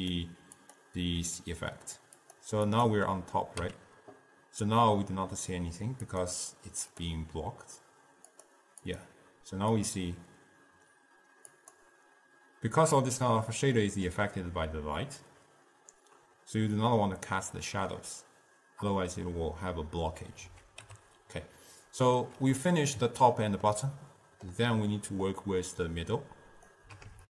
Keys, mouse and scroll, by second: 0.2 click, 0.8 click, 2.4-3.8 drag, 3.8 n, 5.9-13.0 drag, 13.4-16.5 middle drag, 21.0 n, 22.7-26.1 middle drag, 26.1 click.